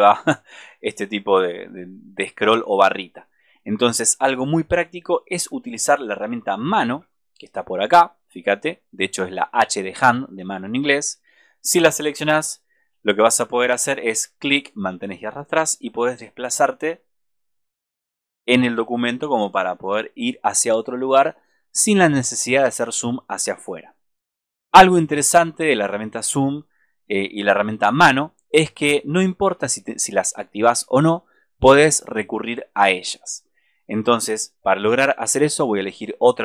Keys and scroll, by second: 6.8 super+=, 12.3 super+-.